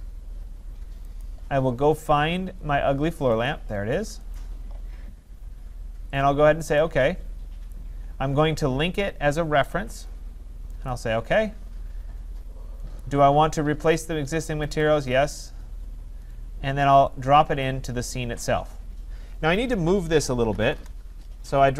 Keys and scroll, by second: 20.7 Return.